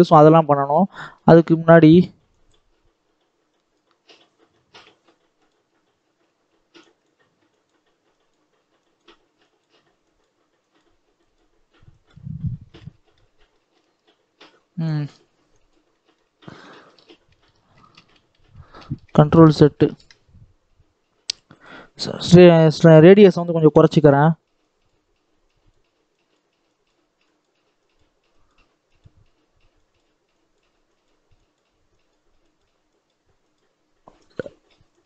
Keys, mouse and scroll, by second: 0.1 middle click, 0.4-0.9 scroll up 2, 0.9 shift+middle click, 1.7 click, 2.7-3.4 scroll up 1, 3.4 click, 4.1 scroll up 1, 4.4 shift+middle click, 5.4-12.3 drag, 12.3-12.7 scroll down 4, 12.7 middle click, 13.3 scroll up 1, 13.4 middle click, 13.8-14.7 scroll up 2, 14.7-15.8 drag, 15.8 shift+middle click, 16.4 ctrl+z, 16.7 ctrl+z, 17.2 ctrl+z, 17.7 ctrl+z, 17.9 ctrl+z, 18.0 ctrl+z, 18.2 ctrl+z, 18.4 ctrl+z, 18.7 ctrl+z, 19.0 ctrl+z, 19.4 ctrl+z, 24.0-35.0 drag.